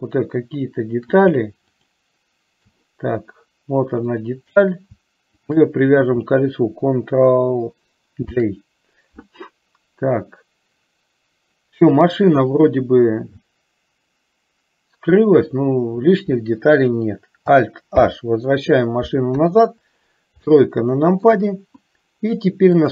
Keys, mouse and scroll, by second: 1.7 shift+click, 4.1 click, 5.7 shift+click, 8.4 ctrl+j, 18.2 alt+h, 19.4 KP_3, 20.8 shift+middle click.